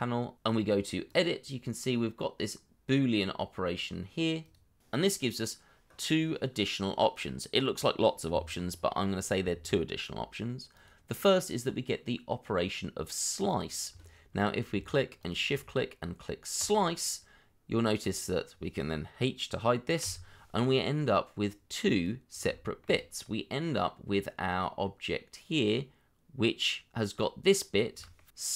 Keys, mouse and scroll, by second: 15.2 shift+click, 20.0 h, 20.8 middle click, 22.6 shift+middle click, 23.2 middle click.